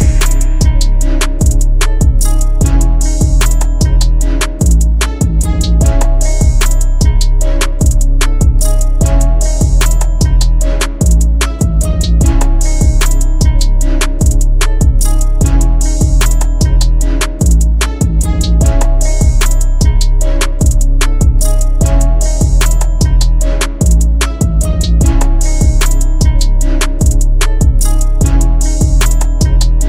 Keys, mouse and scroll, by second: 1.4 Return, 2.1 Right, 2.4 Right, 2.7 Right, 2.8 Right, 3.7 Right.